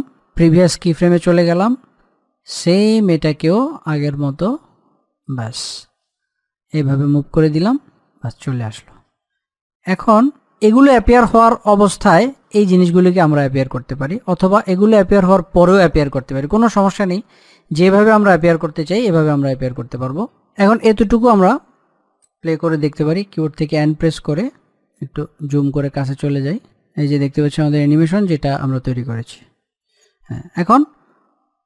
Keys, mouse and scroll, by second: 0.6 click, 3.0-9.5 drag, 9.5-10.2 scroll down 1, 10.4 scroll up 1, 10.4-12.2 middle drag, 12.2-13.8 middle drag, 13.8-14.6 scroll up 1, 14.6 scroll down 1, 21.3 click, 23.1 n, 24.8 click, 25.2-25.5 scroll down 1, 25.5 middle click, 26.6 click, 29.8-31.6 drag.